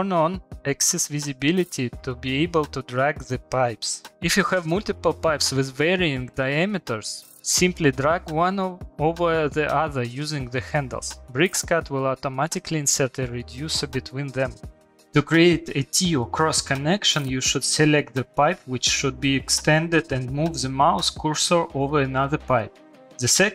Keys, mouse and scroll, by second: 1.4 click, 1.9 click, 2.4 click, 2.5 click, 3.7 Escape, 4.0 click, 4.1 shift+middle click, 4.8 click, 5.3 click, 6.1 click, 7.4 ctrl+z, 8.0 click, 8.7 click, 11.3 Escape, 11.3 click, 12.1 click, 13.1 click, 14.2 middle click, 15.0 shift+middle click, 15.0 click, 15.8 click.